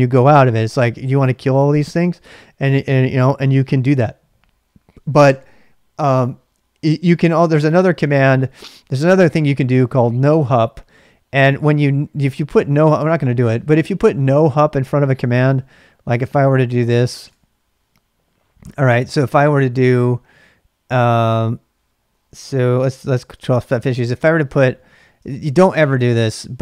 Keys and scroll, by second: 25.3 typing.